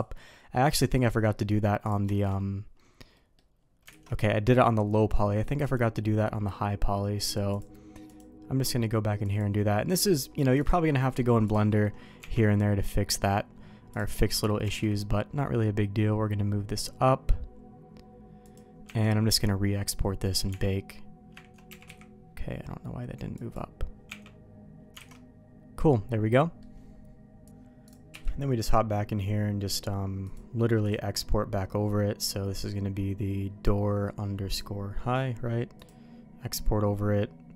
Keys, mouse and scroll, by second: 0.3 middle click, 1.3 middle click, 1.8 click, 2.1 shift+middle click, 3.1 middle click, 3.9 alt+a, 5.6 click, 7.2 click, 7.5 click, 8.1 click, 9.2 click, 10.6 click, 11.1 middle click, 11.4 click, 11.7 middle click, 12.2 Tab, 13.9 click, 14.2 middle click, 14.6 g, 19.5 Tab, 20.5 Tab, 21.7 g, 24.1 Tab, 25.0 alt+a, 25.1-26.6 middle drag, 27.8 click, 28.1 q.